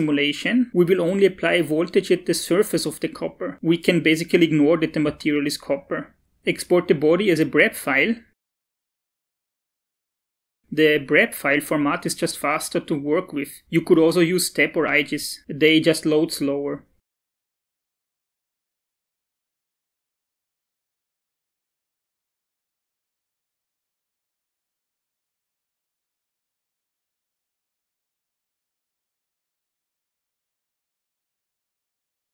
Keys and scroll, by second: 6.3 ctrl+shift+e, 20.5 shift+Delete, 22.7-26.8 typing, 28.1 Return.